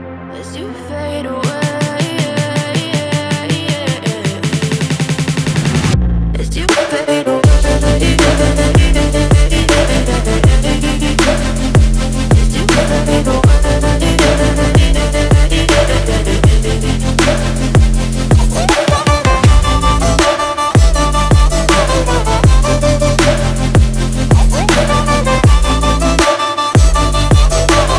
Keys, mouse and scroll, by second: 25.3 right click, 26.6-27.7 typing.